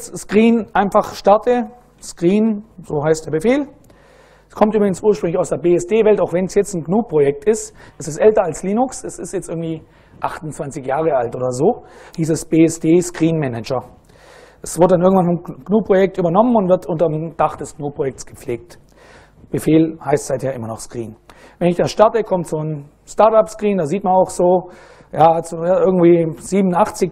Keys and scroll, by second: 1.6-3.1 typing, 21.6 Return.